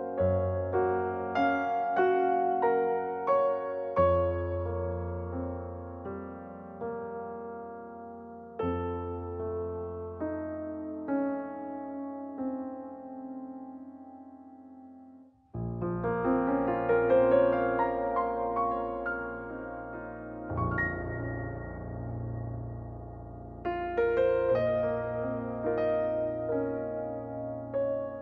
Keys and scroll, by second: 6.3 typing, 7.4 Return, 8.9-9.6 typing, 11.0 m, 13.0-14.5 typing, 16.9-17.7 typing, 26.8 5.